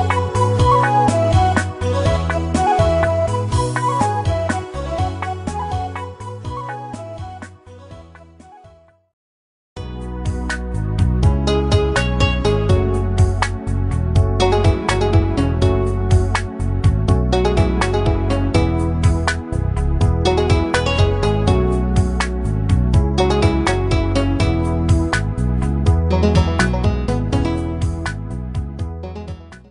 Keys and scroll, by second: 3.1 ctrl+alt+shift+e.